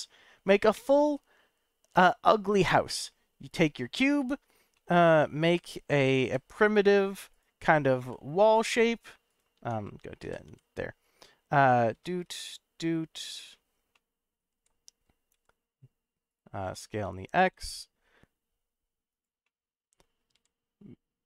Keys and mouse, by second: 4.1-4.6 right drag, 4.7-5.0 right drag, 5.4 g, 5.7 x, 6.2 y, 7.3 right click, 7.6 s, 8.0 y, 9.6 Tab, 10.2 s, 10.4 y, 11.5 click, 11.9 s, 12.2 z, 13.3 click, 13.9 middle click, 14.5 g, 15.3 x, 16.3 right click, 16.6 s, 17.0 x, 17.9 x, 19.1 click, 19.5 middle click, 20.3 g.